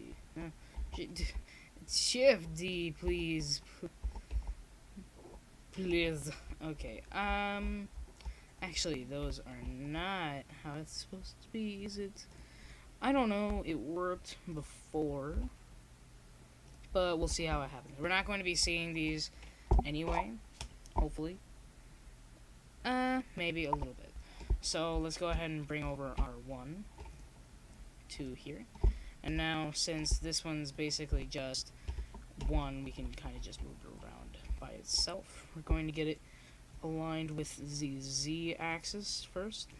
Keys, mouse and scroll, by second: 1.0 s, 3.7 middle click, 4.2 middle click, 5.0-6.3 drag, 6.3-8.4 right drag, 7.4 click, 8.7 click, 8.7 right click, 9.3-10.4 right drag, 10.4 s, 11.7 click, 11.7 right click, 13.3 shift+d, 15.2 click, 15.7 shift+d, 17.5 d, 17.9 z, 19.2 shift+d, 21.5 Tab, 22.6 Tab, 22.8 z, 24.4 middle click, 27.9 s, 32.4 s, 33.7 click, 34.6-35.7 drag, 34.6 s, 36.2-37.8 drag, 36.5 a.